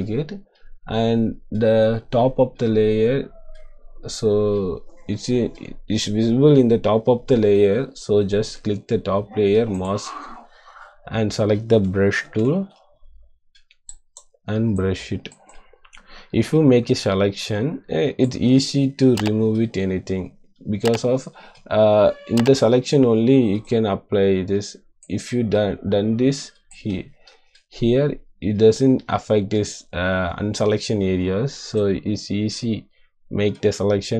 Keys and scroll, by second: 12.2 b, 27.2 ctrl+z.